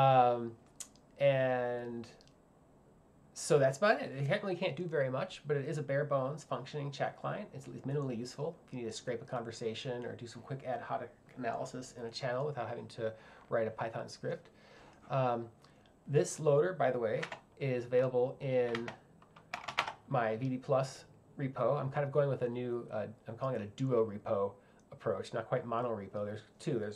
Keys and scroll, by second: 18.8-20.2 typing.